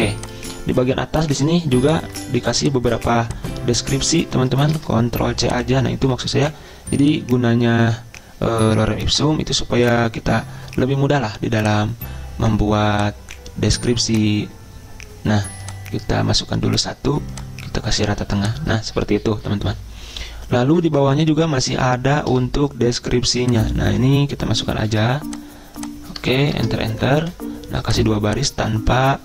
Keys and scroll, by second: 4.8 ctrl+c, 6.2 ctrl+v, 24.9 ctrl+c, 26.5 Return, 26.7 Return, 27.3 ctrl+v.